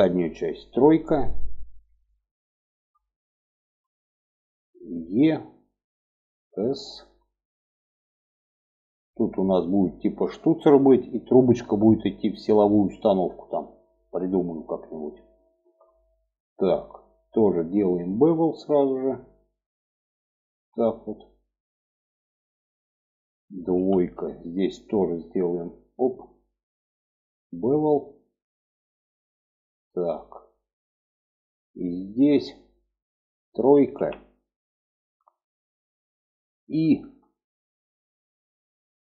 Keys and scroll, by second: 0.0 3, 4.4 e, 5.8 s, 23.1 2, 33.3 3.